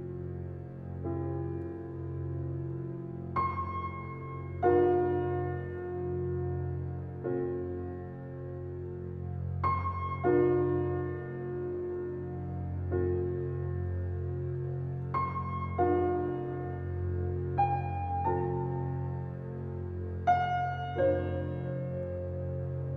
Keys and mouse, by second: 0.0-1.6 typing, 0.7 alt+click, 2.2 alt+click, 2.6-4.8 alt+drag, 4.8 typing, 5.6 click, 6.9 alt+click, 10.1 alt+a, 10.5-10.9 ctrl+alt+drag, 11.8-12.1 alt+shift+drag, 12.4 alt+shift+click, 18.1-19.2 alt+drag, 19.7 ctrl+alt+click, 20.4 ctrl+alt+click, 20.7 alt+shift+click, 21.4-22.9 ctrl+alt+shift+drag, 21.7 typing, 22.5 Tab.